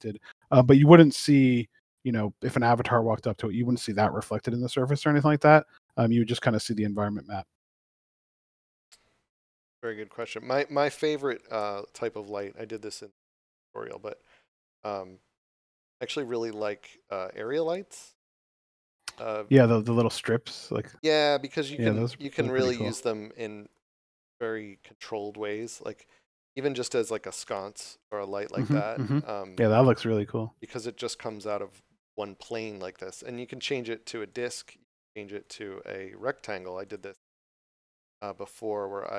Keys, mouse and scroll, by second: 1.8 right click, 4.3 shift+a, 6.7 click, 9.7 click, 11.3 g, 16.1 right click, 16.9 scroll down 1, 18.2 scroll up 1, 18.3 g, 19.7 click, 20.2 scroll up 1, 21.3 g, 22.7 click, 23.5 g, 25.5 click, 25.9 scroll up 1, 26.8 middle click, 28.1 middle click, 29.6 scroll down 1, 30.2 middle click, 31.6 scroll up 1, 33.6 click.